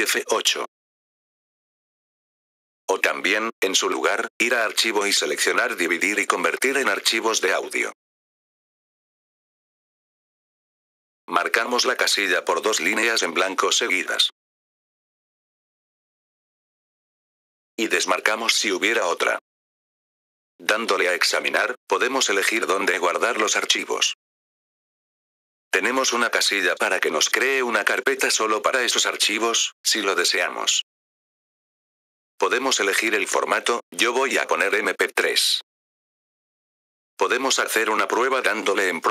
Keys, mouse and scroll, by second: 1.5 F4, 2.7-4.6 drag, 4.6-6.4 drag, 8.3-10.5 drag, 10.5 F4, 11.2-13.0 drag, 13.4 click, 14.6-16.4 drag, 17.4 F4, 17.6-19.5 drag, 20.0 F4, 20.4-22.2 drag, 22.3-24.9 drag, 26.0-30.2 drag, 30.5-32.6 drag, 33.1-38.3 drag.